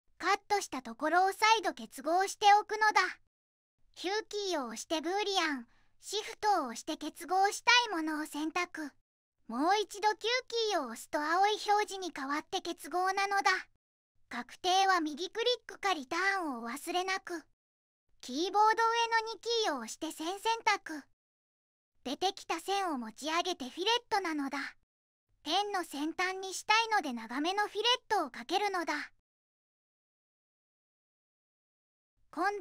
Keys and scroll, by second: 0.2 Return, 0.7 Return, 2.3 q, 3.9 q, 8.3 q, 10.2 q, 18.5 2, 20.7 Escape, 26.9 2, 27.1 0, 27.3 Tab, 28.4 shift+Tab, 29.8 5, 30.0 0, 30.2 Tab, 31.1 Return.